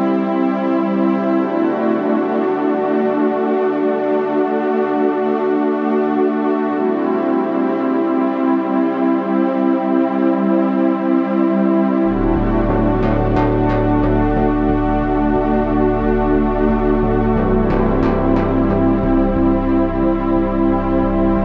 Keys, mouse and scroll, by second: 0.6 z, 5.9 Tab, 6.4 z, 6.9 Tab, 8.9 Tab, 11.1 Tab, 13.1 Tab, 15.1 Tab, 17.5 x, 18.5 Tab.